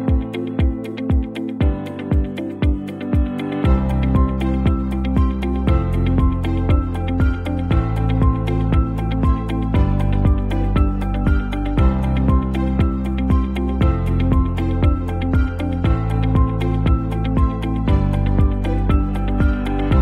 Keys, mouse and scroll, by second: 0.2 space, 1.3-3.1 alt+drag, 3.2 space, 3.4-3.8 click, 4.3-5.9 alt+drag, 6.0 space, 6.0-6.6 click, 6.4 space, 6.8 alt+scroll down 1, 7.0 space, 7.1-7.6 click, 7.5 space, 8.4-10.2 alt+drag, 10.6 space, 11.4-13.7 alt+drag, 14.3 ctrl+t, 14.7 ctrl+Left, 16.2 ctrl+Return, 17.8-20.0 shift+drag.